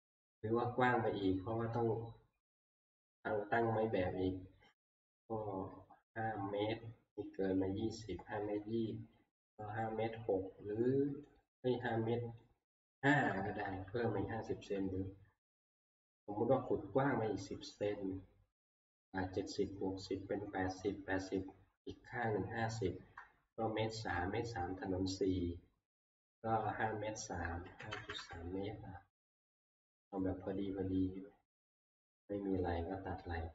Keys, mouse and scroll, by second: 11.4 click, 12.4 click, 27.4-28.6 typing, 30.2 click, 32.0 scroll, 32.9 middle click.